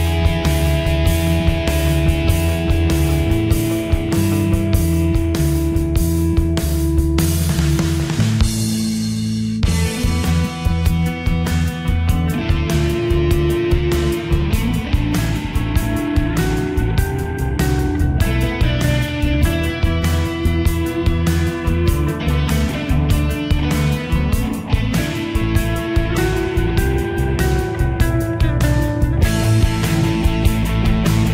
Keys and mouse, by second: 0.6-2.8 typing, 4.3 click, 12.1 click, 17.9 click, 25.7 click, 28.4 click.